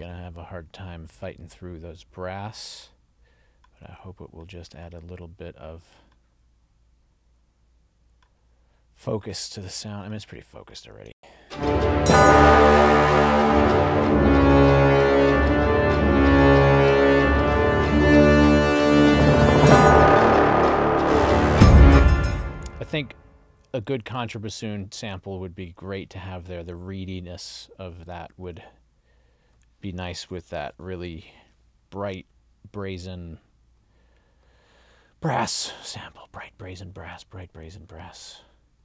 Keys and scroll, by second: 11.1 space, 21.8 space.